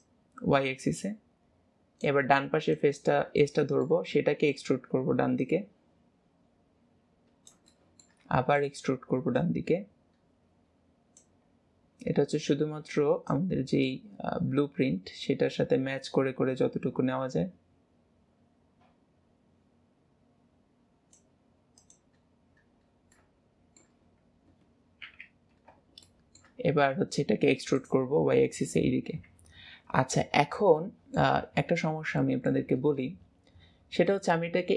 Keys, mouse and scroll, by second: 0.0 click, 2.7 click, 3.1-3.5 scroll down 2, 3.5 shift+middle click, 4.2 e, 5.5 click, 7.8 shift+middle click, 8.3 e, 9.4 click, 11.4 scroll up 2, 12.4 click, 13.3 click, 21.8 click, 22.5 scroll down 3, 23.2-25.1 middle drag, 25.1 KP_7, 26.0 shift+middle click, 26.6 e, 28.6 click, 30.6 click, 30.8 shift+middle click, 31.4 scroll up 2, 32.2-34.1 shift+middle drag, 34.1 click.